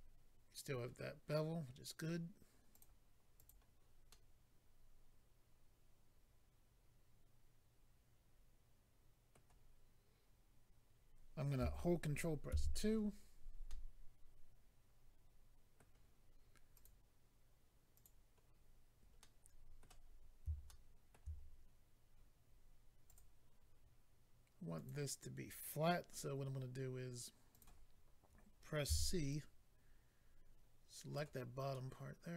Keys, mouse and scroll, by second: 2.7 click, 3.3 click, 3.4 click, 4.1 middle click, 12.5 ctrl+2, 13.6 middle click, 16.7 click, 17.9 click, 18.7-19.2 scroll up 2, 19.2 middle click, 20.1 scroll up 1, 20.7 shift+middle click, 21.4 scroll up 1, 22.6 scroll up 1, 23.1 click, 23.2 click, 24.7 click, 24.9 click, 27.5 click, 27.6 click, 28.8 c, 29.3 click, 31.7 middle click.